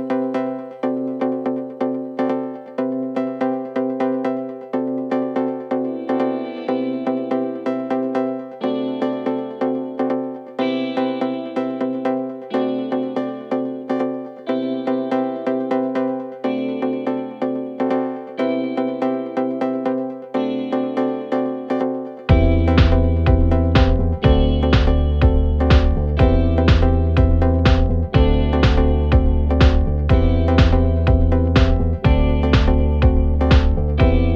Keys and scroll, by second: 3.5 3, 4.5 Return, 4.9 Escape, 5.0 ], 5.7 ], 5.9 F1, 6.1 F2, 8.9 4, 9.7 1, 11.6 4, 16.1 3, 16.4 ], 16.8 [, 17.1 ], 20.1 ], 20.8 ], 21.7 ], 22.8 F1, 26.1 4, 30.0 3.